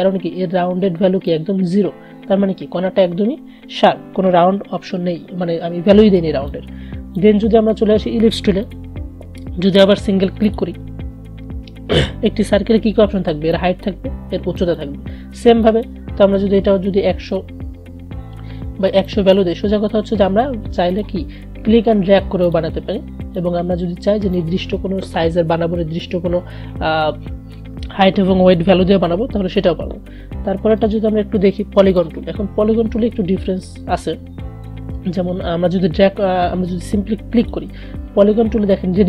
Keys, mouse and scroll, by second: 6.6-8.6 drag, 13.6 click, 17.3 BackSpace, 19.2-27.0 drag, 30.8 right click, 32.0 click, 37.5 click.